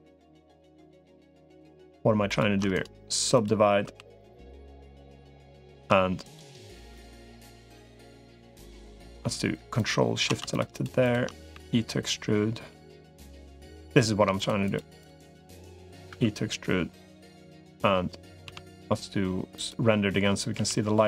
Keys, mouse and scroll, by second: 0.8 shift+click, 2.4 middle click, 2.8 right click, 3.4 middle click, 3.8 3, 5.0 click, 6.0 click, 7.6 shift+click, 8.8 middle click, 9.6 ctrl+shift+click, 10.8 shift+click, 11.0 middle click, 11.4 e, 14.2 shift+click, 14.8 shift+click, 15.2 shift+click, 16.0 e, 18.2 z, 20.4 g.